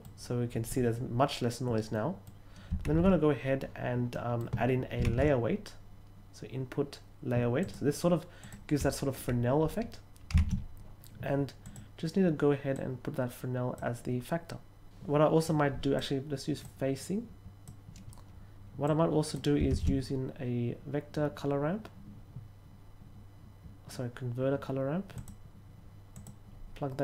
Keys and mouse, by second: 1.9 middle click, 2.8 shift+a, 4.0 middle click, 4.9 shift+a, 7.5 click, 8.3 click, 10.2 shift+a, 11.5 click, 12.7-13.7 drag, 15.4-15.9 drag, 16.5-17.5 drag, 18.8-19.3 drag, 19.6 shift+a, 25.1 click, 26.0 click.